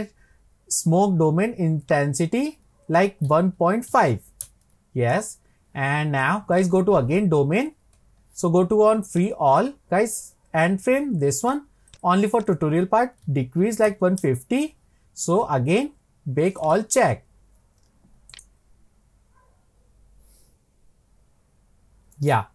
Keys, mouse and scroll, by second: 1.8 click, 6.6 click, 7.4-8.3 scroll down 27, 9.1-12.0 drag, 12.4-15.4 drag, 16.6-21.8 drag.